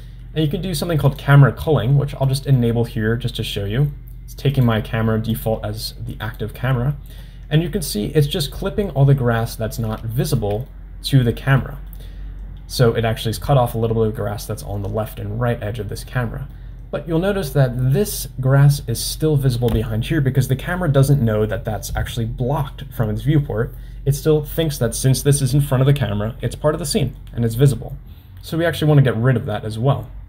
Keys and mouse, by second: 1.2 click, 3.2 click, 4.6-6.5 drag, 7.8-9.1 middle drag, 10.2 shift+middle drag, 10.7-11.2 middle drag, 11.8 middle click, 16.7-17.5 middle drag, 26.9 middle drag.